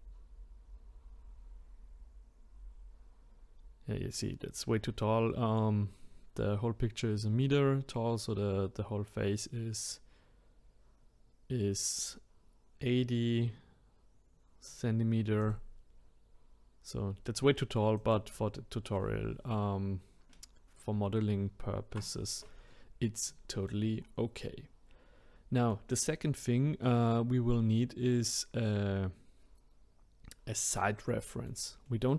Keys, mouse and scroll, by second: 9.4 click, 15.4 click, 18.0 click, 20.8 ctrl+z, 21.5 ctrl+z, 23.3-24.0 middle drag, 24.0-24.4 scroll down 2, 24.4-27.5 middle drag, 30.8-32.1 middle drag.